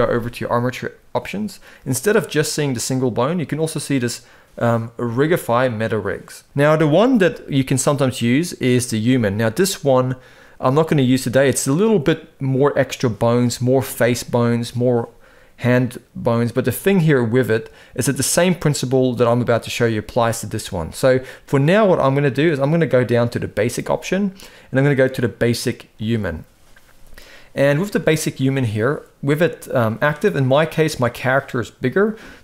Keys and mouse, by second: 27.9 shift+middle drag, 31.9 drag, 32.3 s.